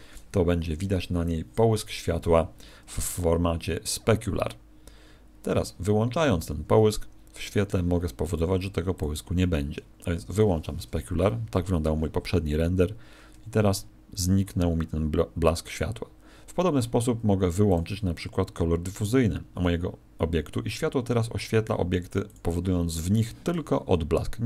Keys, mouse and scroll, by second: 6.4 Escape, 7.4 right click, 8.9 click, 10.2 click.